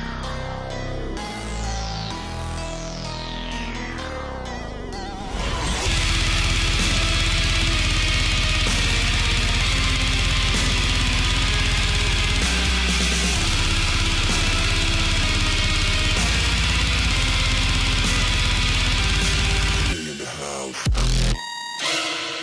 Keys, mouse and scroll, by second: 1.1 right click, 1.6 click, 2.9 alt+scroll up 1, 3.2-7.3 drag, 7.4-9.2 drag, 9.4-9.8 alt+scroll down 1, 10.0-11.4 drag, 11.4 alt+scroll down 1, 11.5 click, 12.0 alt+scroll up 1, 12.1-16.0 drag, 16.0-18.7 alt+shift+drag, 18.8 alt+scroll up 1, 19.0-20.6 drag, 20.8 right click, 21.3-22.4 drag.